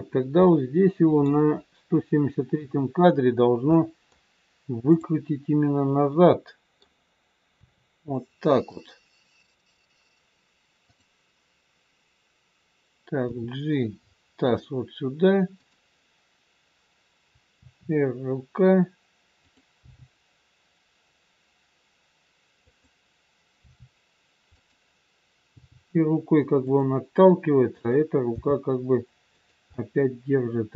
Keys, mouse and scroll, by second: 0.0-0.5 scroll up 2, 0.5 middle click, 1.5-3.4 scroll down 1, 3.7 middle click, 4.8 click, 6.2 middle click, 7.5 r, 10.9 click, 13.3 g, 15.5 click, 17.5 r, 19.8 g, 23.5 r, 25.5 g, 27.8 click, 28.7 g, 29.8 middle click.